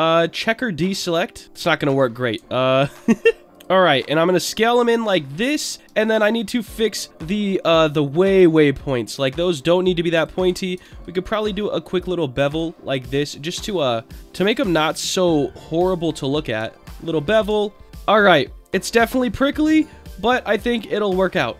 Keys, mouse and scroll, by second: 1.4 click, 1.4 ctrl+z, 2.5 alt+middle click, 2.8 alt+middle click, 3.4 scroll up 1, 3.5 click, 3.9 middle click, 4.6 middle click, 5.1-5.5 scroll up 2, 5.5 Tab, 5.8 Tab, 6.3 click, 6.8 middle click, 7.5 click, 8.5 click, 9.8 click, 10.7 ctrl+b, 11.8 scroll down 1, 12.5 click, 13.0-14.4 middle drag, 14.6 middle click, 15.0 scroll down 1, 16.0 click, 16.9 ctrl+b, 17.2 click, 17.5 Tab, 17.8-19.9 middle drag, 20.6-21.5 drag.